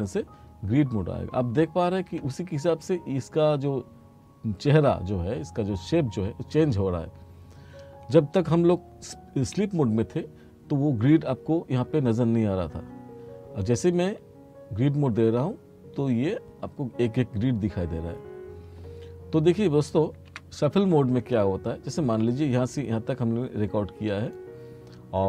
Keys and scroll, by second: 9.5 F2, 14.0 F4, 20.4 F1.